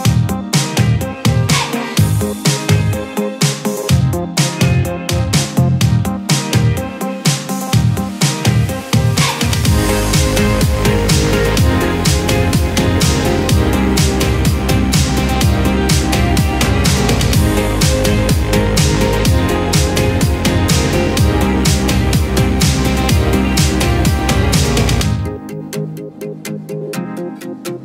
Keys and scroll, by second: 5.5 ctrl+c, 7.5 ctrl+v, 19.5 ctrl+z, 21.7 ctrl+q.